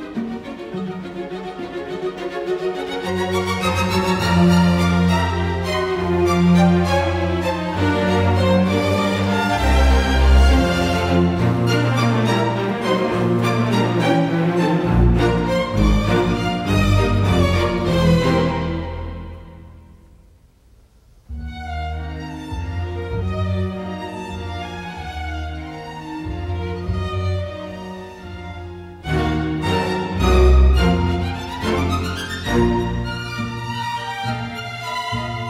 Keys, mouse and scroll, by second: 0.1 Escape, 3.8 ctrl+j, 4.8 Delete, 5.6-6.4 typing, 6.6 Return, 12.7 ctrl+j, 13.2 Escape, 19.6-21.5 typing, 24.5 space, 32.4 ctrl+t.